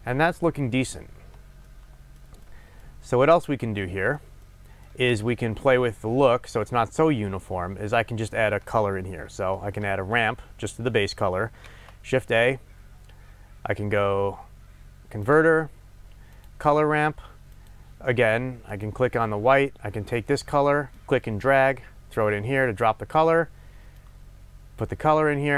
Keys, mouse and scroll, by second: 1.7-17.9 shift+middle drag, 11.7 shift+a, 17.9 click, 18.7 click, 21.2-22.1 drag, 23.9-25.5 drag.